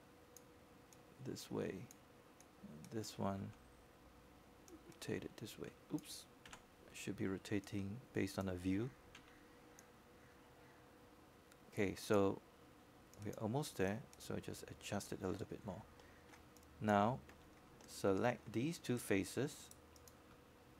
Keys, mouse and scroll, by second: 0.4 right click, 1.8-3.2 drag, 5.0 shift+click, 6.3 shift+e, 7.6-9.2 drag, 9.7 w, 10.4-14.1 drag, 14.1 e, 15.4 click, 17.2 z, 18.4 click, 19.9 w, 19.9 w, 20.6-20.7 drag.